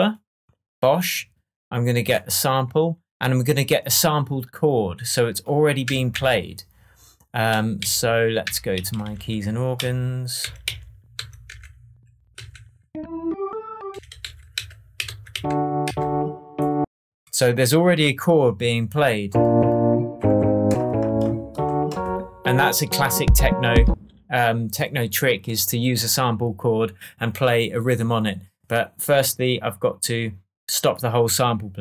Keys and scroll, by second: 5.8 Down, 6.1 Right, 7.7 Left, 8.4 Down, 8.7 Up, 9.1 Right, 9.7 Down, 10.4 Right, 10.6 Down, 11.1 Right, 11.4 Down, 13.9 Up, 14.2 Left, 14.5 Down, 15.0 Right, 15.3 Down, 23.2 space.